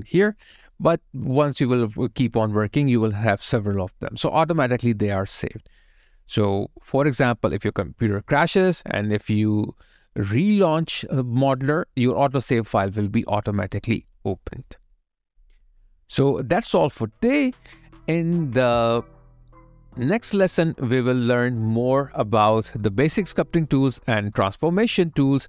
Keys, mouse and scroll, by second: 20.3 alt+click.